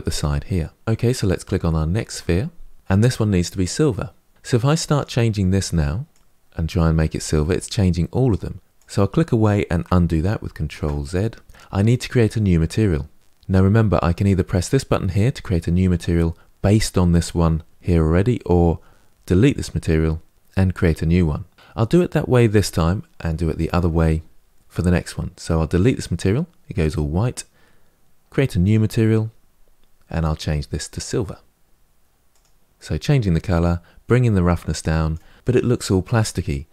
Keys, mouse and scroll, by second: 1.8 click, 5.9 click, 10.3 ctrl+z, 25.6-32.1 drag, 34.0-36.7 drag.